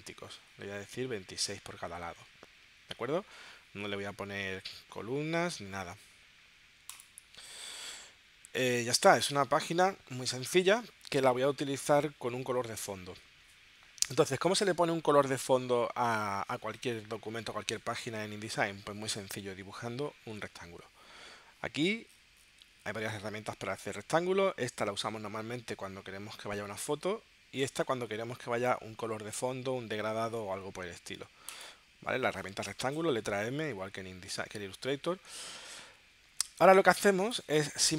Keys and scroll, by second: 36.4 space.